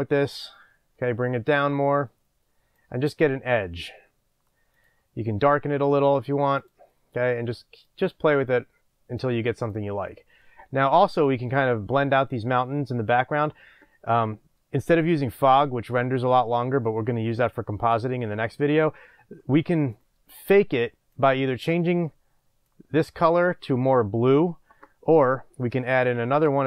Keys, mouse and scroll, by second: 6.6 click, 9.7 click, 10.2-10.8 scroll down 2.